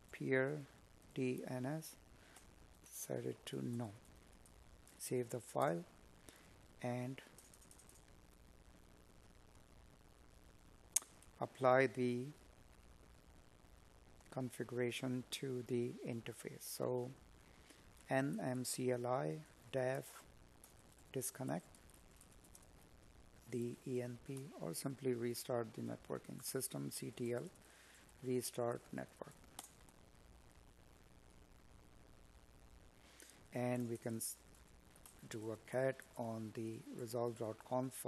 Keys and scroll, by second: 14.3 space, 15.2 space, 17.8 space, 22.7 space, 23.8 space, 30.7 space, 32.5 Tab.